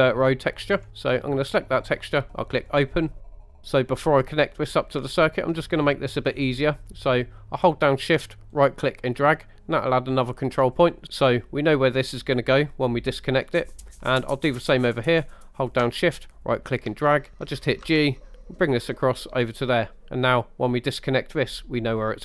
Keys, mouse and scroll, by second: 3.2 middle click, 3.2 scroll down 2, 3.6 scroll up 1, 3.6 ctrl+z, 5.0 scroll up 3, 5.5 middle click, 6.3-7.5 scroll up 3, 8.6 shift+right click, 13.5 middle click, 14.1 middle click, 16.4 shift+right click, 17.9 g, 20.3 click.